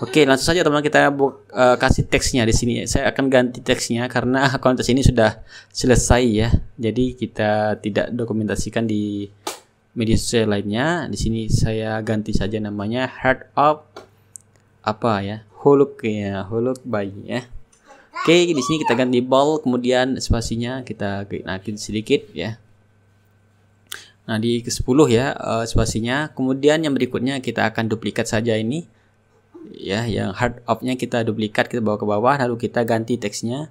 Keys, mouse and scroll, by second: 0.3 click, 2.8 click, 4.8-7.8 typing, 8.1 ctrl+a, 11.4-14.2 drag, 14.5 t, 15.1 ctrl+click, 15.5 ctrl+a, 17.3 click, 20.3-23.7 drag, 24.0 middle click, 24.0-24.8 scroll up 1, 25.3-26.6 middle drag, 26.6-28.2 drag, 29.9 click, 30.9 ctrl+d, 31.4-33.7 ctrl+drag, 32.9 t.